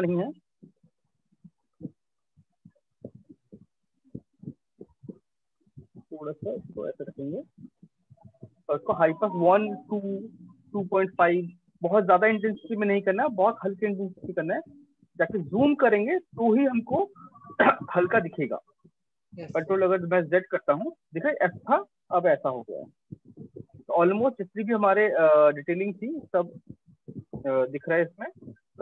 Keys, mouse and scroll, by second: 1.5 click, 2.9 click, 4.1 click, 6.5 click, 7.2 ctrl+space, 11.4 scroll, 11.9 ctrl+click, 12.2 ctrl+click, 12.4 ctrl+click, 13.3 click, 13.5 ctrl+click, 13.9 ctrl+click, 14.0 ctrl+click, 14.3 ctrl+click, 14.3 ctrl+click, 14.6 ctrl+click, 14.7 ctrl+click, 15.9 click, 16.4 click, 19.8 ctrl+z, 22.5 ctrl+y, 25.0 click, 25.9 click, 27.3 ctrl+-, 27.6 ctrl+-, 27.8 ctrl+-, 28.6 ctrl+space.